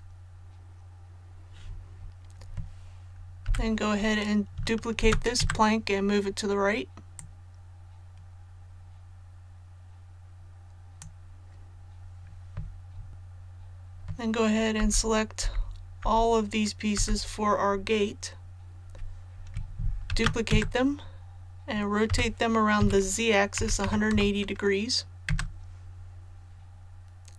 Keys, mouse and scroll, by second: 3.4 typing, 4.9 shift+d, 7.1-11.4 drag, 14.7-16.9 typing, 20.0 shift+d, 22.0-23.8 typing.